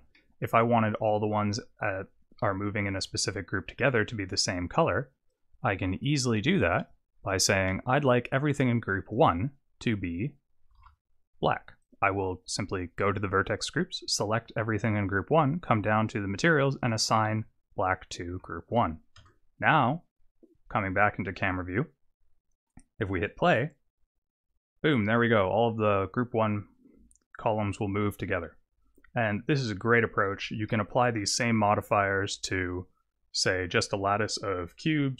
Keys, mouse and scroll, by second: 0.1 middle click, 0.9 click, 3.0 Tab, 5.3 click, 6.0 click, 6.8 click, 7.6 click, 9.1 click, 10.8 alt+a, 11.9 click, 14.1 click, 15.6 click, 16.8 click, 18.4 Tab, 19.2 KP_0, 23.2 click, 30.5 click, 30.7 middle click, 32.4 click.